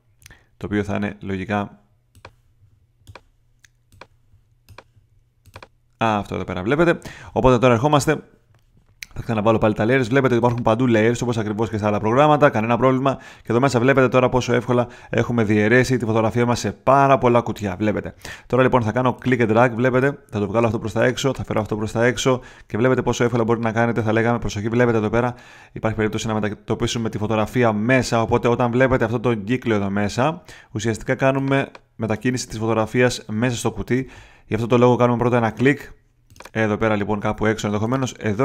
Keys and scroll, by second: 26.9 super+z, 33.9 super+z.